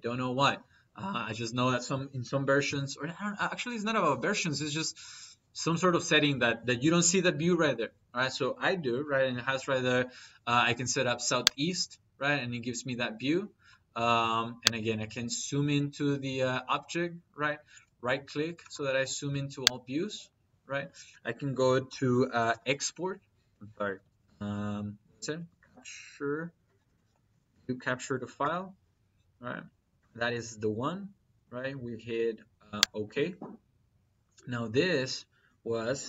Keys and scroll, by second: 21.7-22.7 typing, 23.5 Escape, 25.2-26.9 typing, 27.4 Down, 28.2 Return.